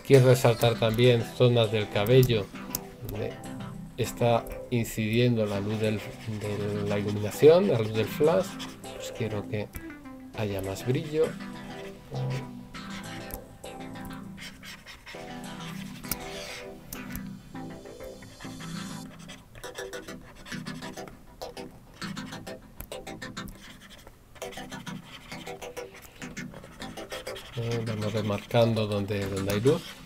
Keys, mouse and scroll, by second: 0.8 right click, 3.0 right click, 4.5 right click, 9.7 right click, 13.2 right click, 17.0 right click, 20.6 right click, 22.7 right click.